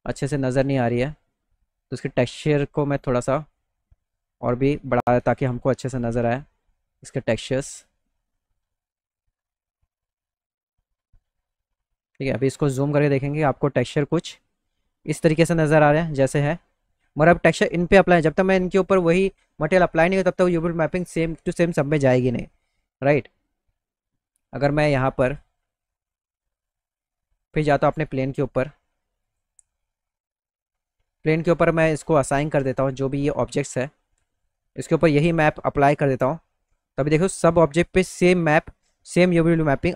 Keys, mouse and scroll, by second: 1.2-2.9 drag, 3.6-5.3 drag, 7.3-9.1 drag, 10.4 middle click, 12.2 middle click, 29.2 click, 31.9 click, 33.3 click, 35.8 click, 37.7 middle click.